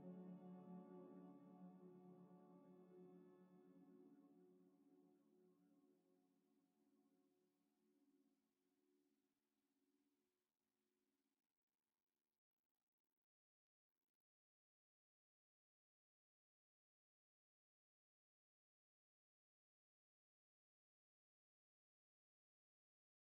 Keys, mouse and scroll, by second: 1.0 Delete, 11.1 Delete, 14.2 Delete, 15.0 Delete, 23.1 Delete.